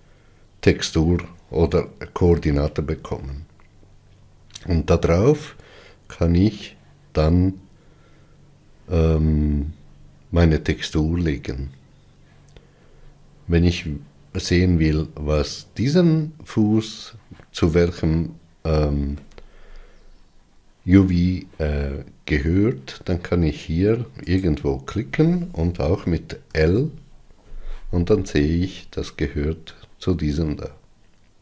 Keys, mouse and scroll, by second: 24.6 click, 26.7 l.